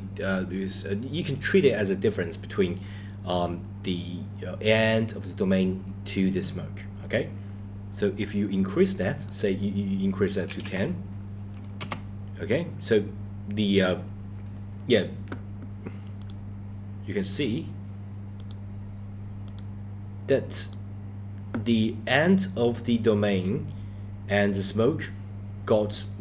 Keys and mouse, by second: 9.4-11.9 drag, 16.2 click, 17.3 click, 18.4 click, 19.5 click, 20.7 click.